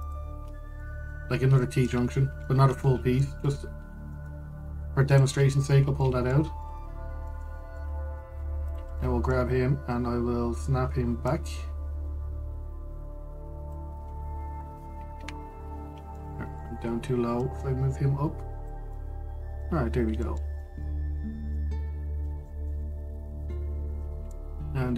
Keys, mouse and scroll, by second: 0.7 alt+shift+click, 1.1-1.5 scroll, 1.5 middle click, 1.9-2.3 scroll, 2.3 shift+middle click, 2.8-3.1 scroll down 1, 3.1-4.4 middle drag, 4.4 g, 6.3-6.7 scroll down 1, 6.7-8.7 middle drag, 8.7 scroll up 1, 8.9 Tab, 9.3 click, 9.6-11.9 middle drag, 11.9 click, 15.8 KP_Decimal, 16.4-16.8 scroll down 2, 16.8-18.1 middle drag, 18.1 click, 19.6-21.7 middle drag, 21.7-22.2 scroll up 2, 22.2-24.4 middle drag, 24.4 scroll.